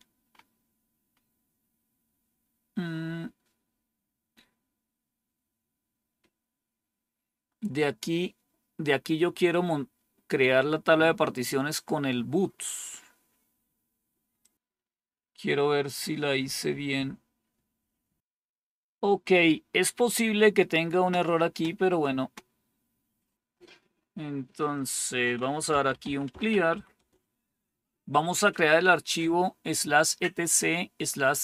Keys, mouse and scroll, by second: 14.3 click, 17.7-18.2 scroll down 1, 23.3 typing, 24.6 click, 25.3-27.1 typing.